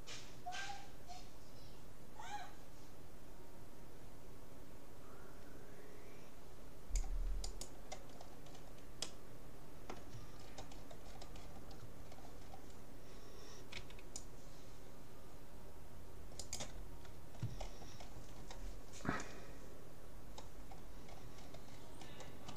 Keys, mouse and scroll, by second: 8.2-14.4 middle drag, 13.8 c, 17.0-17.6 scroll up 1, 17.6-19.0 middle drag, 19.0-19.4 scroll up 1, 19.4-22.5 middle drag.